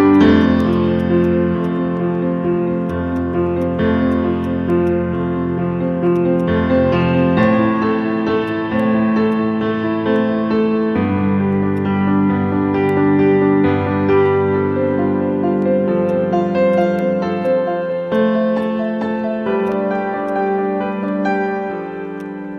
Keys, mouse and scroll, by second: 0.4 right click, 4.8 alt+click, 5.4-6.0 scroll up 1, 6.0 scroll up 1, 6.1 alt+click, 8.2 alt+middle click, 9.7 scroll down 1, 11.0 scroll up 1, 16.7 double click, 17.4 right click.